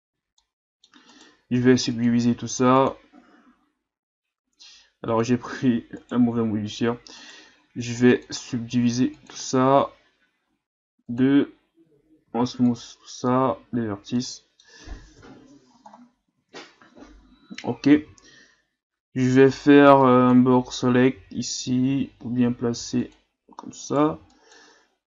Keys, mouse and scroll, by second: 0.1 a, 0.4-1.1 middle drag, 1.1 right click, 2.9-4.9 drag, 5.1 click, 6.0 right click, 7.2 right click, 9.3-12.2 drag, 12.2 w, 13.8 scroll down 1, 14.2-15.2 middle drag, 15.2 KP_3, 15.9 scroll up 1, 16.4 Tab, 17.1-17.4 shift+scroll up 1, 18.0 z, 19.5 right click, 19.8 b, 21.1 g, 23.8 right click, 24.0 b.